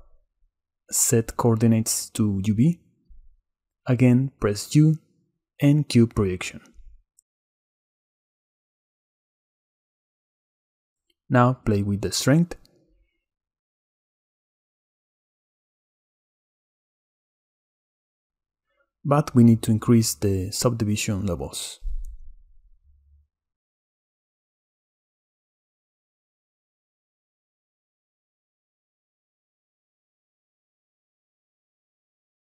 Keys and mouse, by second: 0.4-1.5 drag, 4.5 Tab, 5.9 u, 8.0 Tab, 12.0-14.5 middle drag, 16.8 shift+middle click, 23.6 click, 24.2 middle click, 24.5-25.9 middle drag, 25.9 click, 26.7 click, 28.1-28.6 middle drag, 29.7 middle click, 30.0-30.4 middle drag.